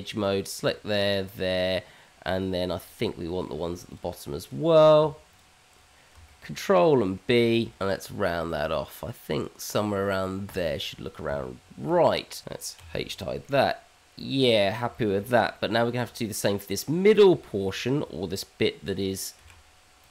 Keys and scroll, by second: 7.3 ctrl+b, 11.2 Tab, 12.8 h, 19.4 q.